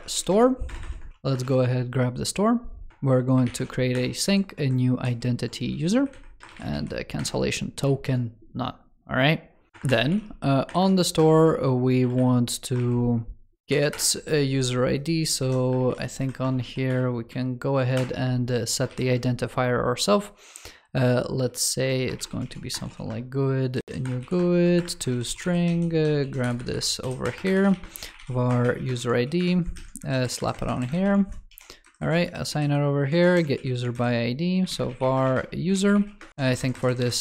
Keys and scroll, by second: 24.9 ctrl+s, 26.0 super+x, 28.8 super+v, 29.6 super+Left, 30.7 ctrl+Right, 31.0 super+c, 31.3 super+e, 32.0 super+v, 33.0 super+v, 33.8 super+Left, 36.3 alt+Right, 36.9 ctrl+Right, 37.0 ctrl+s.